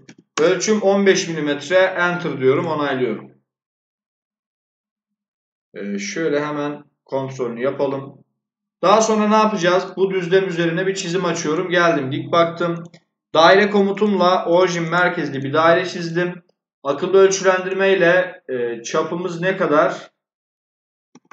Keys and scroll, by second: 0.0-0.5 typing, 20.8-21.3 typing.